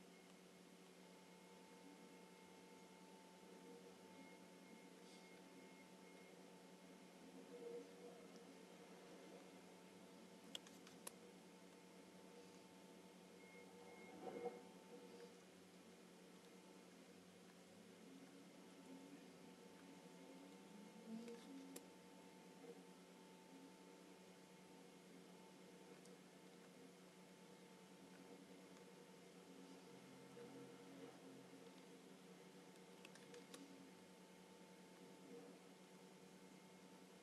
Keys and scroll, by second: 10.6 space, 21.3 space, 33.1 space.